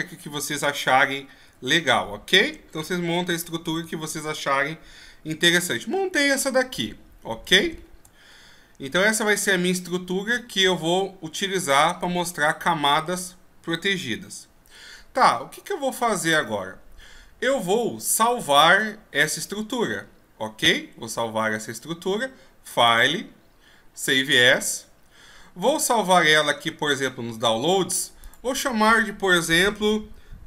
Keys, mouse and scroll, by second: 0.8 e, 7.7-8.3 shift+scroll up 3, 8.3-9.7 scroll up 1, 10.3 middle click, 14.0-15.0 scroll up 1, 22.7 click.